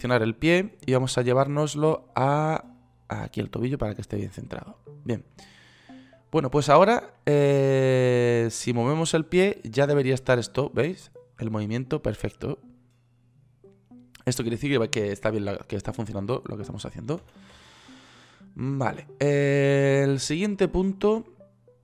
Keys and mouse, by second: 2.2-3.2 drag, 17.7 ctrl+z.